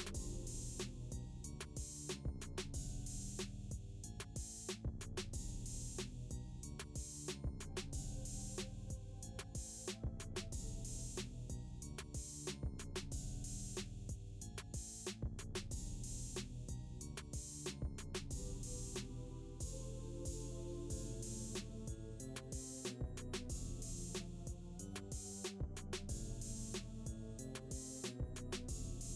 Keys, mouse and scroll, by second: 2.3-2.6 scroll down 1, 2.6 click, 5.6 scroll down 1, 7.6 click, 11.6-18.6 drag, 22.2-23.8 drag, 25.0 space.